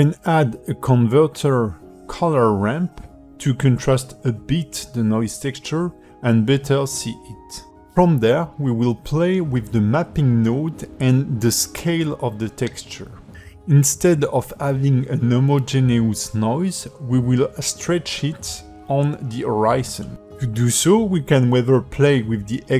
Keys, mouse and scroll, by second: 1.0 shift+a, 5.4 click, 7.4 click, 9.1 click, 10.0 alt+middle click, 11.5-11.8 scroll up 4, 12.1 shift+middle click, 12.8 scroll up 2, 13.3 shift+middle click, 21.8 click.